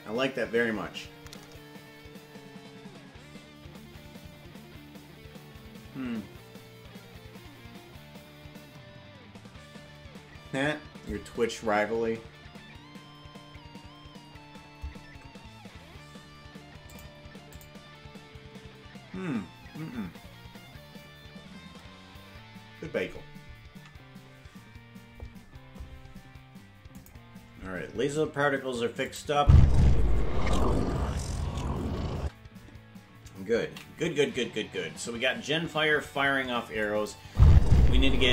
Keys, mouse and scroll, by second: 27.1 click, 29.1 click, 29.3 space, 32.2 space, 36.2 ctrl+s, 36.9 click, 37.2 space.